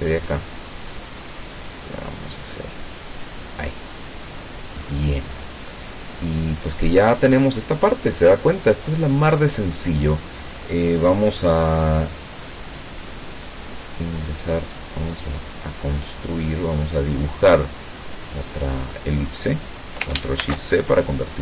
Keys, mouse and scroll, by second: 0.5 click, 4.0 click, 4.9-5.3 scroll down 2, 5.3 scroll up 2, 5.6-5.9 scroll down 2, 6.2 scroll up 2, 12.5 click, 14.8-16.7 drag, 18.6 click, 20.5 ctrl+shift+c.